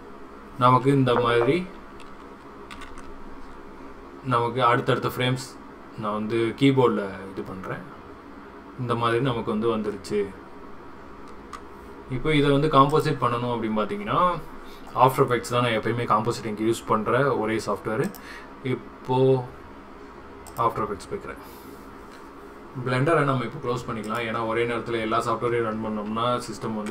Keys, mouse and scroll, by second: 26.3 ctrl+s.